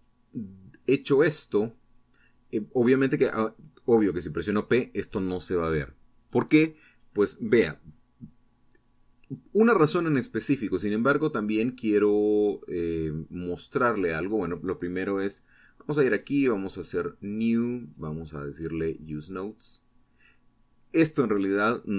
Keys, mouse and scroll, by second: 1.0 p, 3.8 Tab, 4.2 Escape, 5.4 click, 7.8-9.2 drag, 10.9 ctrl+Left, 13.5 click, 14.8 click, 16.2 right click, 18.0 click, 18.8 middle click.